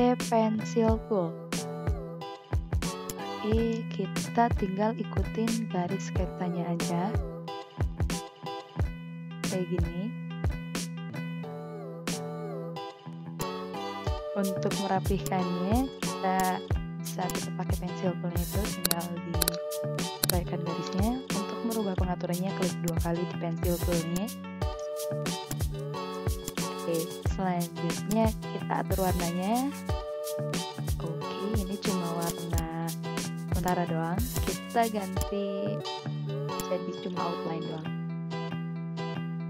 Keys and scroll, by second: 14.8 ctrl+z, 16.2 ctrl+z, 17.0 ctrl+z, 17.9 ctrl+z, 24.9 ctrl+z, 34.9 v.